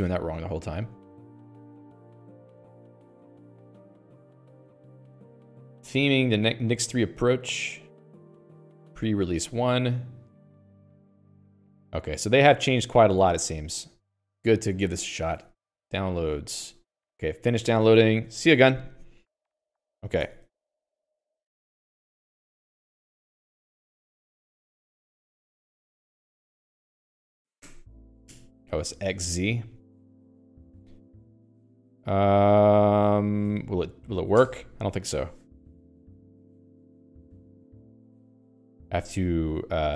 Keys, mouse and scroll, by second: 13.7 l, 14.4 Escape, 18.2 Escape, 18.6 Escape, 18.8 Escape, 20.6 click, 20.7 Escape, 22.3-28.0 typing, 24.5 Return, 31.1 Escape, 32.2-33.5 h, 33.8 shift+a, 34.8 Return, 38.9 Escape, 39.6 a.